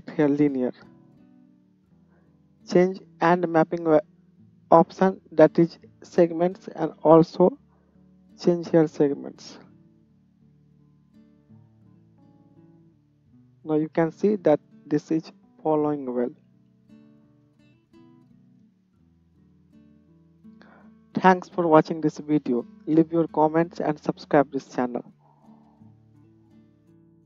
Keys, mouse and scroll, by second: 1.8-11.6 drag, 11.6-11.9 middle drag, 11.9-27.2 drag, 14.8 space, 17.5 space, 18.6 space.